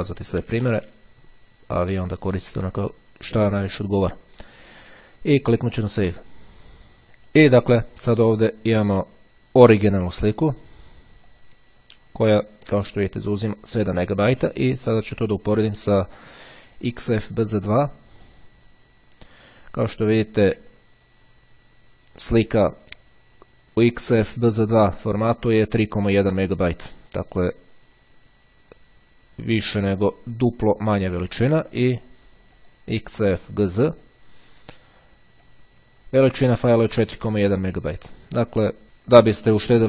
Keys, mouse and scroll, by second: 0.5 z, 0.8 2, 2.2 click, 4.8 click, 7.4 click, 9.2 click, 11.4 click, 12.5-13.7 drag, 14.8-15.8 drag, 16.4 click, 17.3 right click, 18.3 click, 20.2-21.6 drag, 27.4-32.4 drag, 32.6 right click, 33.8 click, 35.6-37.2 drag.